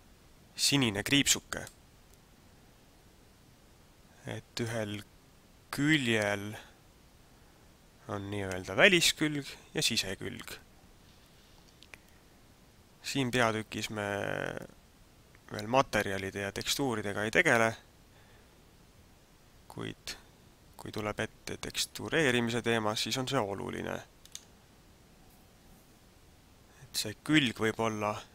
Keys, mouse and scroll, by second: 1.8 middle click.